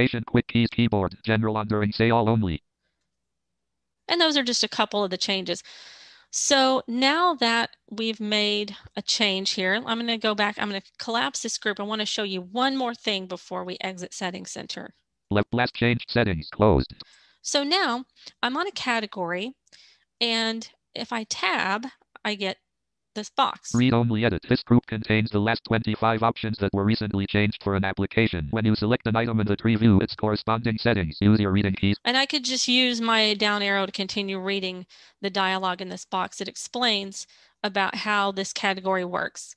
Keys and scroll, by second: 20.7 Tab.